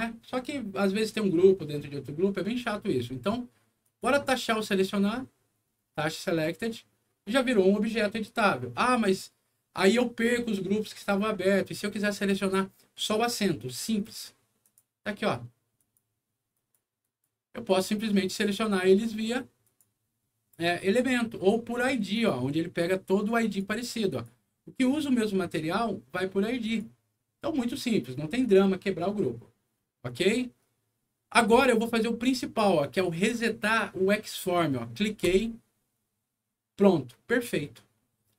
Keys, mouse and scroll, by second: 3.8 click, 4.5 click, 14.6 click, 15.8 click, 16.5 click, 17.0 click, 18.3 click, 19.6 click, 22.1 click, 23.5 click, 24.1-26.8 drag, 28.4 click, 30.0 click, 32.0 click, 35.2 click.